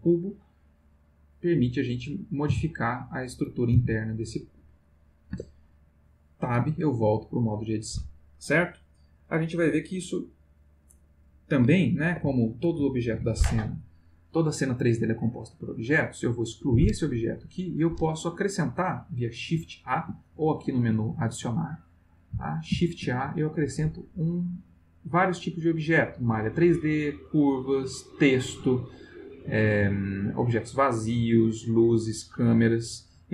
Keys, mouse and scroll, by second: 2.2 click, 2.5 g, 3.0 click, 3.6 click, 3.8 g, 4.2 click, 4.6 middle click, 5.3 Tab, 6.7 ctrl+middle click, 7.1-8.2 ctrl+middle drag, 11.7-12.3 ctrl+middle drag, 12.3-12.8 ctrl+shift+middle drag, 13.1 ctrl+middle click, 16.7 x, 17.1 click, 22.7 shift+a.